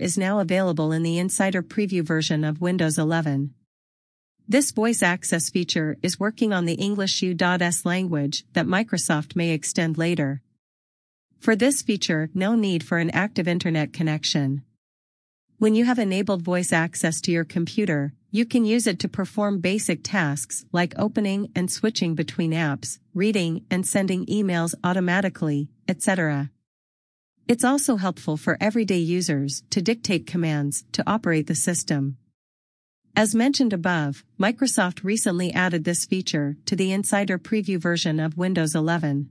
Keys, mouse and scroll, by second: 5.4-5.9 scroll down 1, 16.7-17.1 scroll down 1, 19.6 scroll up 1, 31.0-31.8 scroll down 1, 33.5-34.4 scroll down 1.